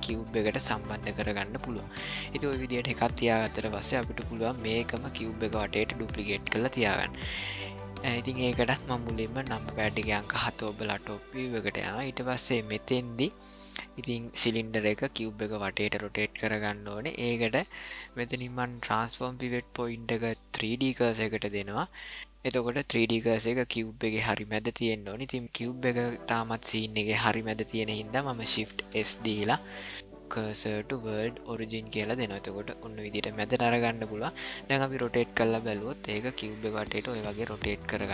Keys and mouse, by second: 2.5 shift+middle click, 3.8 ctrl+middle click, 4.6 middle click, 9.8 KP_7, 11.0-11.8 shift+middle drag, 12.2 ctrl+middle click, 18.8-20.7 drag, 28.9 shift+s, 34.8 r.